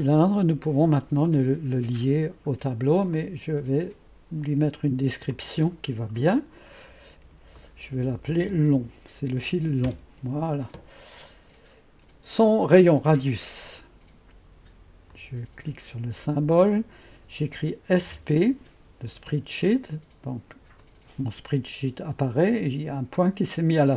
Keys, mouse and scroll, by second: 3.2 click, 5.4 click, 7.3 F2, 8.3-9.4 typing, 9.9 Return, 13.7 click, 15.2 click, 18.0 typing, 20.9 click.